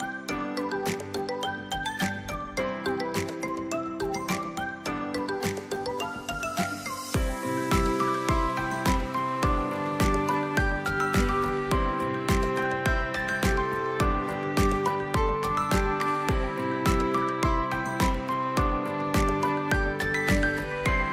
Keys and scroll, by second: 1.6-4.3 typing, 5.6 space, 11.9 v, 14.8 ctrl+d.